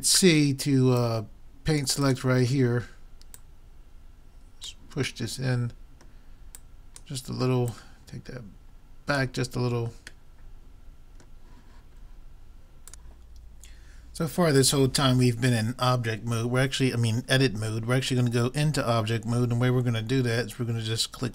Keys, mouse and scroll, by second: 0.1 c, 3.4-5.1 drag, 5.3-6.6 middle drag, 6.6 click, 7.2-9.3 right drag, 9.3 click, 10.3 middle click.